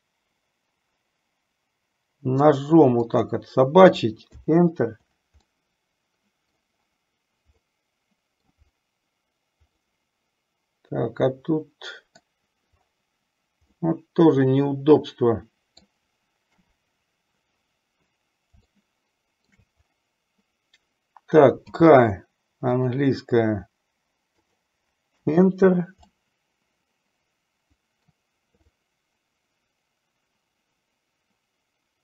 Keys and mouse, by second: 5.9 middle click, 7.8 middle click, 9.9-12.6 middle drag, 13.9-16.3 middle drag, 16.7 KP_7, 18.9 shift+middle click, 21.9 k, 26.4-28.5 middle drag, 29.1-32.0 middle drag.